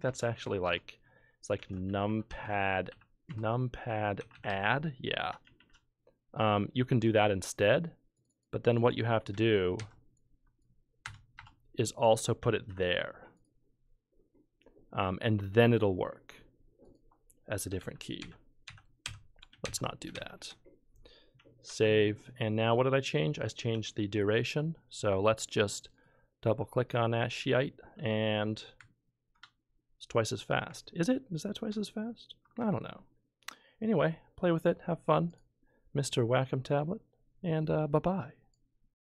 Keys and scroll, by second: 0.0 BackSpace, 0.4 Up, 0.6 Return, 1.3-5.6 typing, 7.0 Down, 9.8 ctrl+c, 11.0 BackSpace, 11.3 BackSpace, 12.7 v, 17.8 ctrl+z, 18.2 ctrl+z, 18.6 ctrl+z, 19.6 ctrl+z, 20.1 ctrl+z, 21.7 ctrl+s.